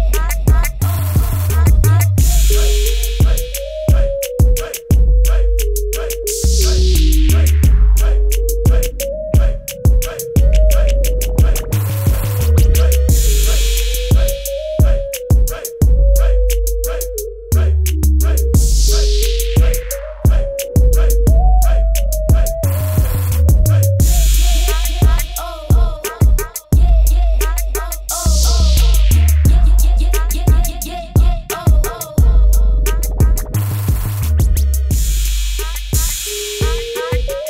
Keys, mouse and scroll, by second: 2.6 b, 2.9 right click, 4.2 click, 5.4 Return, 8.1 click, 10.0 KP_0, 10.7 click, 18.1 shift+click, 20.3 click, 26.2-27.1 scroll down 1, 27.1 click, 29.2 click, 30.9 KP_Enter, 31.4 ctrl+t, 31.6 click, 33.3 click, 34.6 KP_Enter, 35.1 click, 36.3 b.